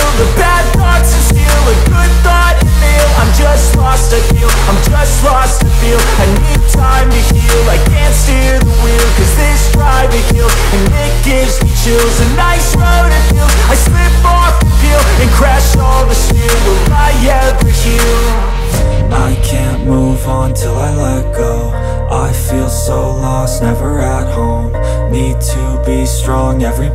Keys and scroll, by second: 8.4 shift+/.